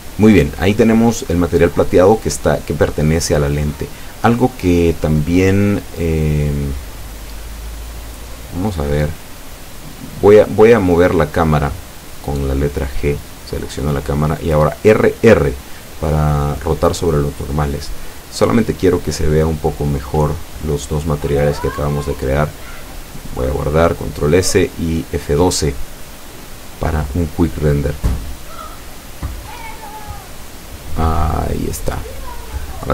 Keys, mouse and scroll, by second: 0.0 alt+shift+right click, 0.6 alt+shift+middle click, 1.8 alt+shift+right click, 2.4 alt+shift+right click, 2.9 alt+shift+scroll down 2, 3.3-4.6 middle drag, 4.8 scroll up 2, 7.4 click, 8.1-8.7 scroll down 4, 8.7 middle click, 9.8 scroll down 2, 10.1 Tab, 10.6-12.4 middle drag, 12.5 scroll down 1, 12.9-13.5 middle drag, 13.9 KP_0, 15.4 scroll down 1, 17.1 right click, 18.4 g, 20.7 click, 21.8 r, 24.1 click, 24.8 g, 27.7 click, 30.7 ctrl+s, 31.3 click, 32.2 F12.